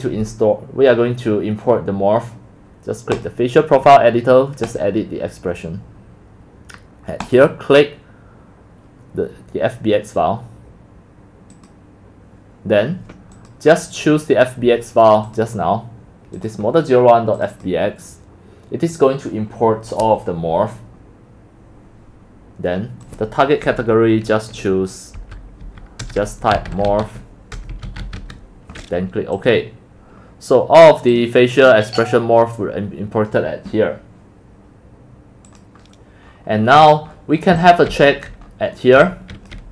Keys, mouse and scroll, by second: 3.2-7.4 drag, 11.5 click, 13.4 click, 15.3 click, 16.4 click, 17.4-22.4 drag, 23.1 click, 25.2-28.7 typing, 29.5 click, 31.1 click, 31.6 click, 35.8 drag, 36.1 click, 36.3-37.3 scroll up 9, 37.0 click, 37.4 scroll, 37.5-39.7 typing, 37.6 middle click, 38.4 click, 38.5 middle click, 39.6-39.7 drag.